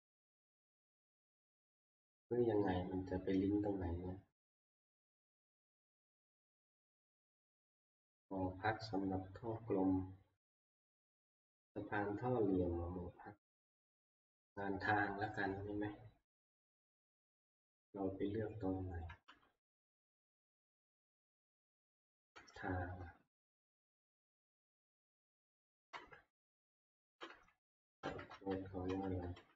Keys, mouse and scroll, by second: 0.0 click, 4.7-5.0 scroll down 2, 5.2 scroll, 6.0 scroll, 11.4-15.0 scroll down 2, 15.0 scroll down 2, 15.2 scroll, 17.3 ctrl+Up, 19.2 ctrl+Up, 19.9 ctrl+Up, 20.2 middle click, 22.4 ctrl+Down, 22.8 ctrl+Down, 23.3 ctrl+Down, 24.2 ctrl+Down, 25.0 ctrl+Down, 25.9 ctrl+Down, 27.3 ctrl+Down, 28.1 ctrl+Up, 28.3 ctrl+Up, 28.9 ctrl+Up, 29.3 ctrl+Up.